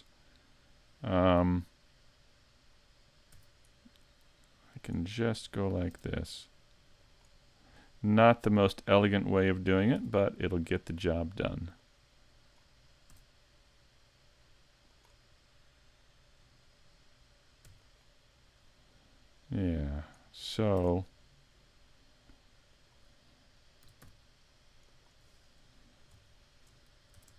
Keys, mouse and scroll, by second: 3.3 e, 4.8 click, 5.9 r, 7.1 click, 8.5 click, 10.0 e, 11.1 click, 11.8 click, 13.1 r, 15.0 click, 17.7 e, 18.9 click, 20.8 r, 22.8 click, 23.8 s, 25.8-26.4 scroll up 2, 26.4 shift+middle click, 27.2 ctrl+Tab.